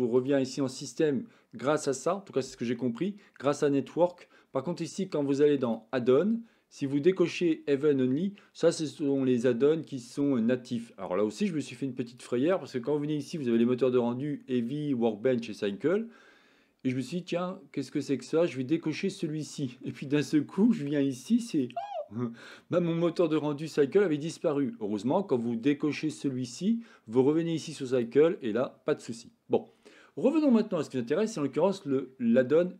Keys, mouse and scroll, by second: 13.6-15.7 drag, 21.4-22.5 drag.